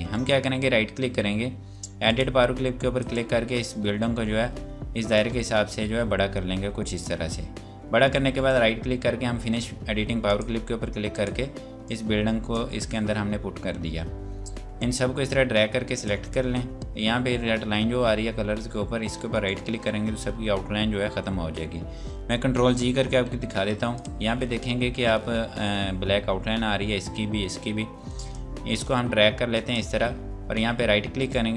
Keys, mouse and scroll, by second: 0.1 right click, 1.9 click, 8.4 right click, 10.2 click, 19.1 right click, 21.4 scroll up 1, 23.3 z, 24.0 click, 27.8 scroll down 1, 28.3 click, 30.9 right click.